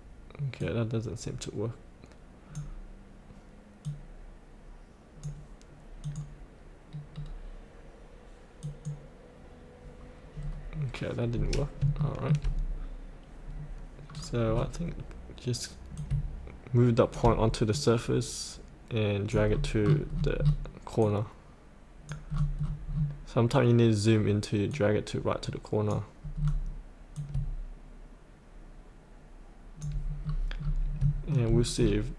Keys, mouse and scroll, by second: 6.9-8.6 scroll down 1, 8.6 click, 10.4-11.3 scroll down 1, 11.3 scroll up 1, 11.9 shift+middle click, 13.5 scroll up 1, 14.1-15.8 scroll down 1, 15.9 click, 17.7 click, 19.4-21.0 scroll down 1, 21.0 click, 22.3-22.8 scroll down 1, 24.7-26.4 drag, 26.4-27.1 scroll down 1, 27.1-29.8 drag, 30.2-30.6 scroll up 1, 31.0 shift+middle click, 31.4 scroll down 1.